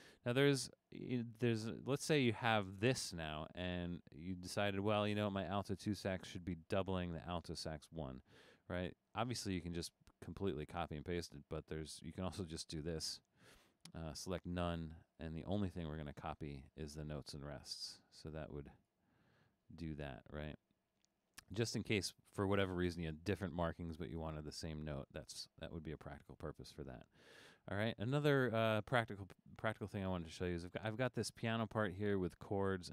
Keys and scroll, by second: 25.3 super+z.